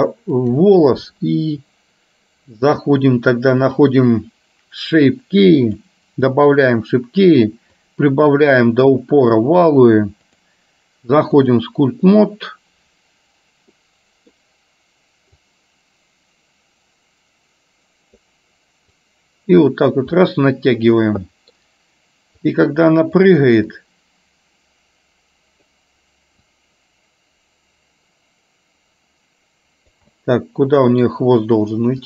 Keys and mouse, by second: 3.8 click, 5.7 click, 6.6 click, 7.9 click, 10.4-11.7 drag, 13.8 middle click, 15.4-18.3 drag, 19.1-20.1 drag, 20.3 middle click, 21.3 middle click, 22.6 click, 23.8-25.8 drag, 26.6-29.9 drag, 30.3 middle click.